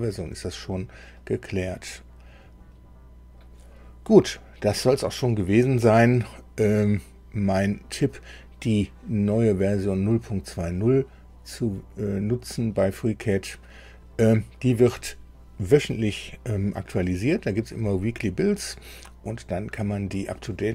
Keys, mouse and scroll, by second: 1.1-3.5 drag.